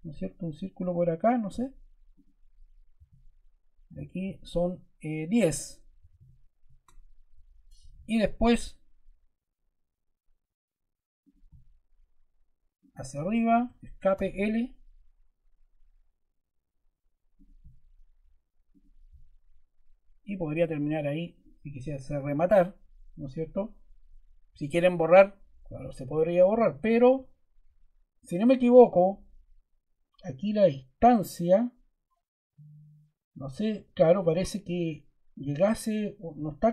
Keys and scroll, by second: 2.9 d, 5.7-6.6 typing, 7.8 l, 13.5 Escape, 14.0 l, 22.1 Escape.